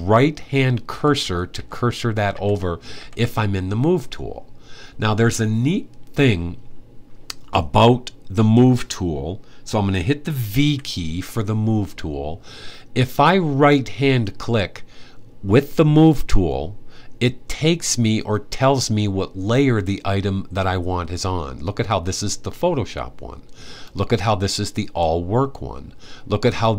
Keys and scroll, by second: 0.7 Right, 0.9 Right, 1.3 Right, 2.1 Right, 2.7 Right, 10.3 v.